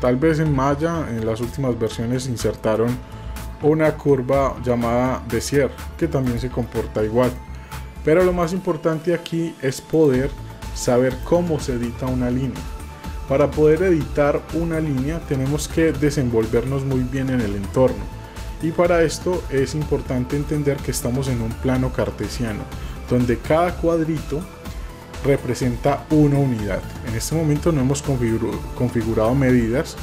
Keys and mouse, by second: 0.0-0.3 shift+middle drag, 0.8 middle click, 1.5 shift+middle click, 2.1 middle click, 2.5 middle click, 7.3-8.5 middle drag, 15.2-16.4 middle drag, 20.3 middle drag.